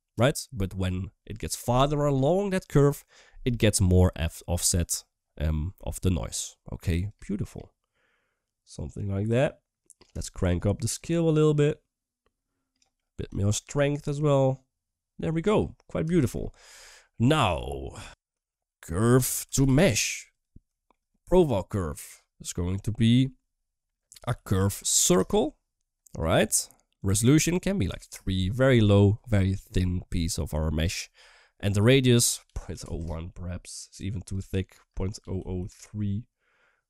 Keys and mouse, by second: 5.2 middle click, 5.9 middle click, 6.9-9.8 shift+drag, 10.0 shift+middle click, 10.9-12.6 drag, 12.8 middle click, 13.5-15.2 shift+drag, 15.9 shift+middle click, 16.8 middle click, 17.2 middle drag, 17.9 ctrl+x, 18.3 shift+a, 20.6 shift+middle click, 21.5-26.1 drag, 26.8-28.0 drag, 28.0 typing, 31.6-32.8 drag, 34.1-35.5 drag.